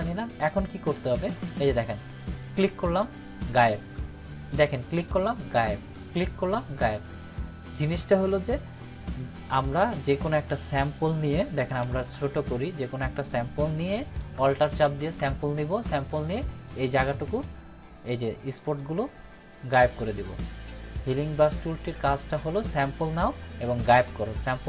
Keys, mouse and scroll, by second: 2.4 click, 11.8 [, 12.1 [, 13.9 alt+click, 15.5 alt+click.